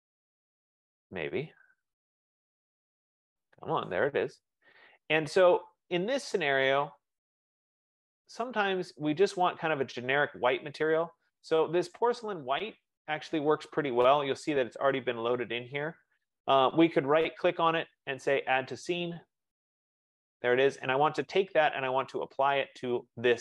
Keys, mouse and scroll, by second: 2.2 F15, 7.0-13.7 drag, 17.5 right click, 19.0 click, 20.9 click.